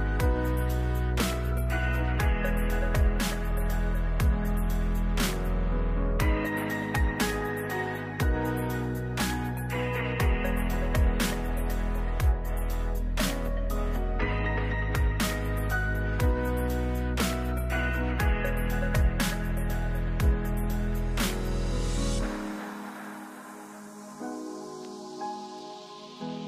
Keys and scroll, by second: 11.3 ctrl+z, 18.3 ctrl+z, 21.1 ctrl+z.